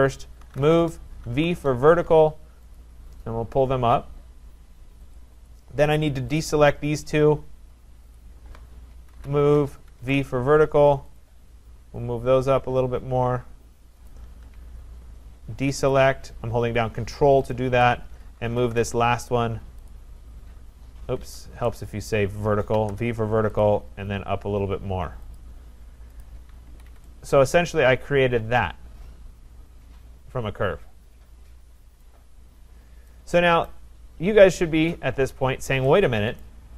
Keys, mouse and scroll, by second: 0.2-1.7 typing, 2.7 click, 5.2 click, 6.4 ctrl+click, 8.2 click, 8.9-10.0 typing, 11.2 click, 13.4-14.1 typing, 14.1 click, 15.9 ctrl+click, 17.5 click, 18.2-20.0 typing, 19.9 click, 21.3 Escape, 21.8 right click, 22.5-23.3 typing, 23.6 click, 25.0 v, 25.3 click, 26.2 click, 26.7 Escape, 26.9 Escape, 32.0 right click, 32.6-32.9 scroll, 33.7 right click, 36.4 right click.